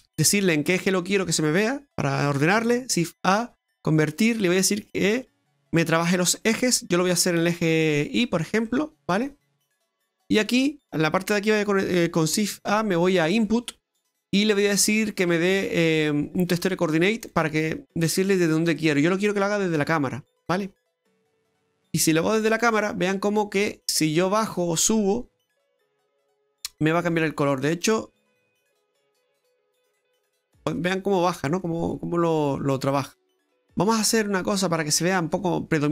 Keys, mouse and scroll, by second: 0.0 click, 0.7 scroll down 3, 0.9 middle click, 2.6 shift+a, 6.2-6.8 scroll up 5, 7.4 click, 8.7 middle click, 9.9 click, 12.6 shift+a, 18.4 middle click, 19.7 click, 22.6 middle click, 26.6 middle click, 28.4 click, 33.6-34.1 scroll up 3, 34.1 middle click, 34.8-35.5 scroll up 3.